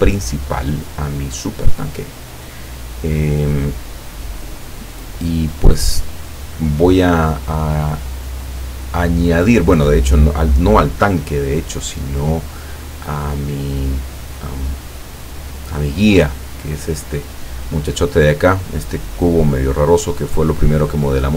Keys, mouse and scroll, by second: 1.4-3.4 drag, 3.8-4.3 scroll down 2, 5.2 scroll down 1, 12.3-14.7 middle drag, 15.2 right click.